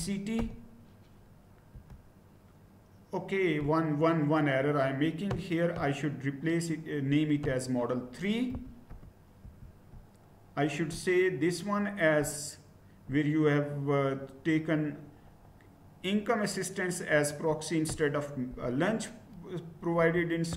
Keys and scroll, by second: 0.0-0.8 typing, 1.8 Return, 8.5 BackSpace, 8.9 3, 9.4 Return, 18.5 BackSpace, 19.9 3.